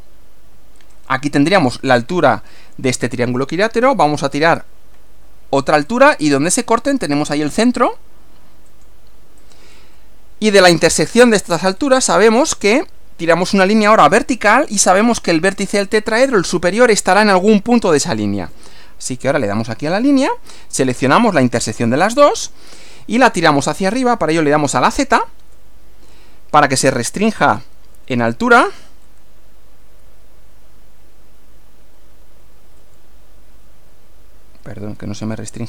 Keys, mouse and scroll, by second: 1.0 click, 4.4 click, 5.9 click, 8.7 click, 9.4 click, 10.0-11.0 middle drag, 11.8 scroll up 1, 19.6 click, 22.4 click, 25.4 z, 29.0 z, 32.8 z, 34.6-35.6 middle drag.